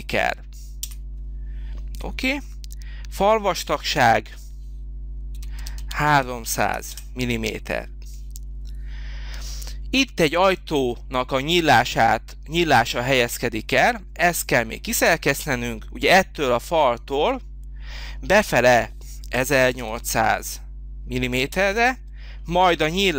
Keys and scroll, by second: 0.9 Return, 5.3 3, 5.6 0, 6.9 Return, 19.1-20.4 typing, 21.5 Return.